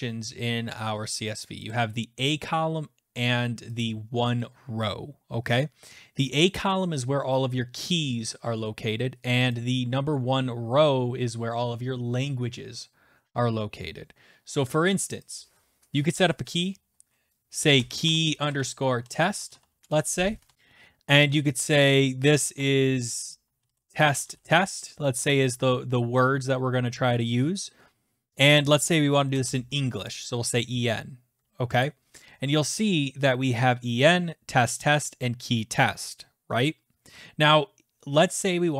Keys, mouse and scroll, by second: 1.7 click, 3.8 click, 6.3 click, 9.5 click, 15.3 click, 17.5-21.0 typing, 22.2-24.8 typing, 29.0-30.3 typing, 35.2 typing.